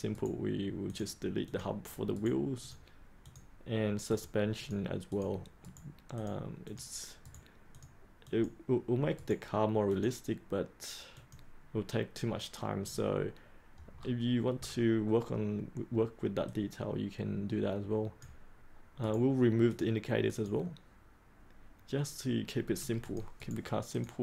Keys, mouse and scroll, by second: 0.1 right click, 0.8 click, 2.1 right click, 2.6 click, 4.0 right click, 4.5 click, 5.6 right click, 6.1 click, 7.2 right click, 7.7 click, 9.1 right click, 9.8 click, 13.9-16.4 scroll up 1, 16.4-17.7 drag, 18.7 click, 18.9 right click, 19.6 click, 23.3 right click, 23.9 click.